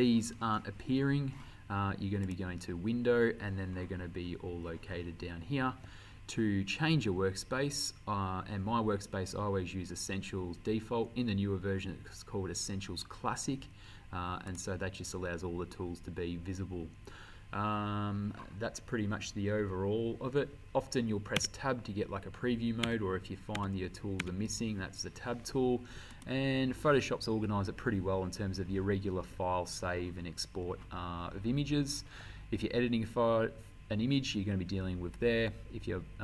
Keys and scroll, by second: 21.6 Tab.